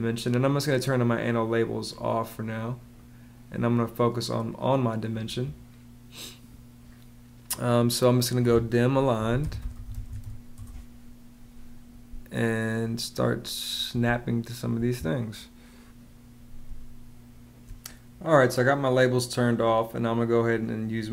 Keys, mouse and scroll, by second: 8.8-10.5 typing, 13.9 space, 16.4 space.